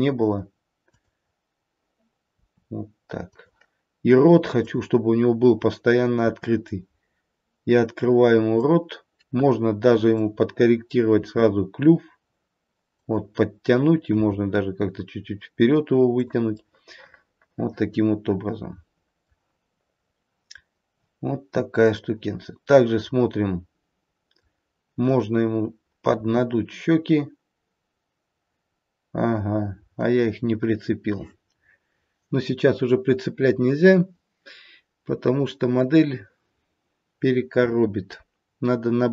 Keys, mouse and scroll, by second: 0.8 click, 2.2 r, 4.5 click, 6.2 r, 10.1 click, 11.3 r, 14.0 g, 16.5 middle click, 17.4 middle click, 19.6-22.1 scroll up 1, 22.1 middle click, 22.1 scroll up 2, 22.4 middle click, 24.9 middle click, 24.9 click, 27.9 r, 30.6-33.6 scroll down 1.